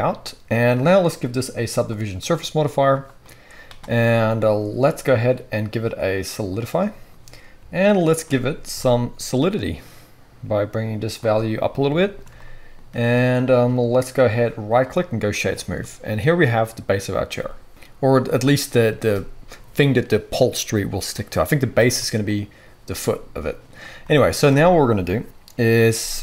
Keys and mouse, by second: 1.2-11.4 middle drag, 11.8-26.2 shift+middle drag.